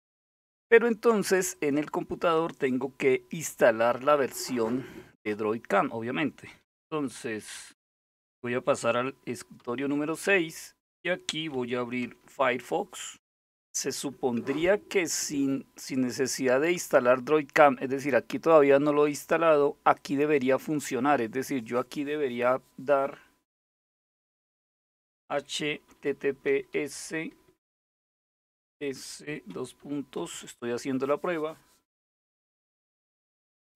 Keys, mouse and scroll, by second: 1.1 click, 9.2 super+6, 11.6 alt+super+w, 19.6 click, 25.0-29.9 typing, 32.7-33.7 typing.